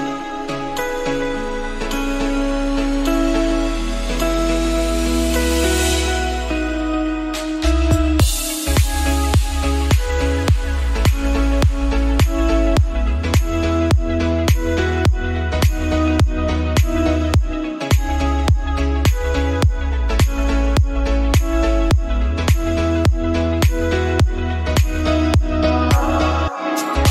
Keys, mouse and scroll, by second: 3.1 ctrl+z, 3.5 click, 3.8 middle click, 4.7 click, 5.2 KP_7, 5.8 scroll up 2, 6.1-7.2 middle drag, 7.2 click, 7.7 right click, 8.4-9.0 scroll down 2, 9.0 click, 9.3-10.7 middle drag, 11.6 scroll down 1, 11.7 middle click, 12.2-19.0 drag, 19.0 middle click, 19.3 scroll up 1, 19.5-20.8 middle drag, 20.8-21.9 drag, 21.9-22.4 scroll down 2, 22.4 KP_7, 22.8-23.1 scroll up 3, 23.1 s, 26.0 KP_Decimal, 26.3 scroll down 4, 26.6 middle click.